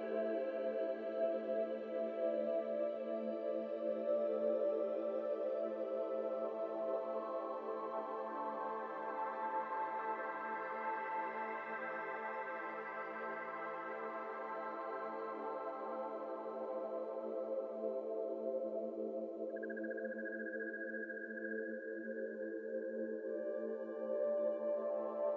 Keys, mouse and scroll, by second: 1.3 click, 2.2 click, 2.5 r, 3.2 x, 3.4 r, 7.6 ctrl+z, 7.9 KP_1, 8.7-9.1 shift+middle drag, 9.1 r, 9.9 g, 11.1 z, 11.2 z, 11.3 z, 12.5 g, 13.4-16.1 drag, 16.1 g, 17.7 z, 17.8 z, 18.0-20.1 g, 21.7-23.4 drag, 23.4-25.3 typing.